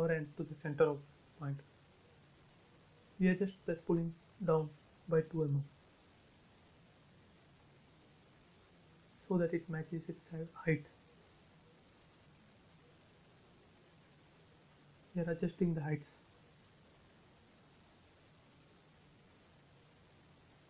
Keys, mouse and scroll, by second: 0.5 click, 1.5 p, 1.8 click, 4.2-5.5 typing, 5.1 Return, 6.1 click, 8.4 m, 9.1 click, 10.4 Up, 12.2 click, 12.3 space, 14.0 p, 14.9 space, 15.8 scroll up 1, 16.1 shift+middle click, 16.1-18.6 shift+middle drag, 18.6-19.2 scroll down 2, 19.6 middle click.